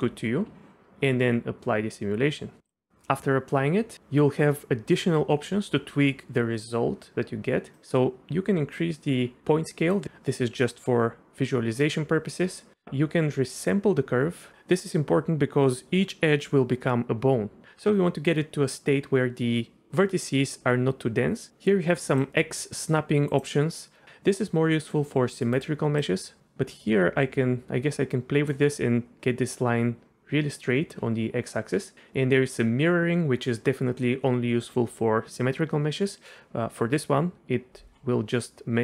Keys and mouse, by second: 2.6 click, 7.8-10.0 drag, 10.6-11.8 drag, 13.8 click, 22.3 click, 23.7 click, 24.6 click, 26.0-28.5 drag.